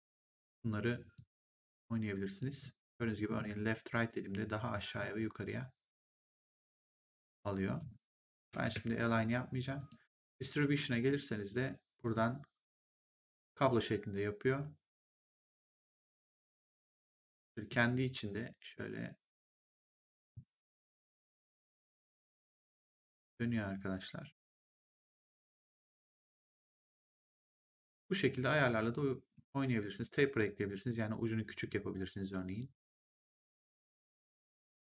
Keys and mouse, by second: 1.0 click, 5.9 click, 8.4 ctrl+z, 9.7 click, 15.8 click, 22.5 click, 25.3 ctrl+z, 28.8 click, 33.5 click.